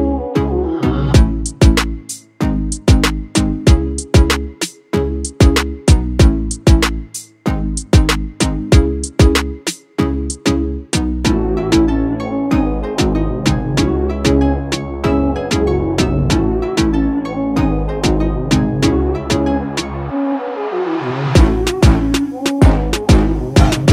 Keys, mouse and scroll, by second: 0.7 click, 6.1-23.9 drag.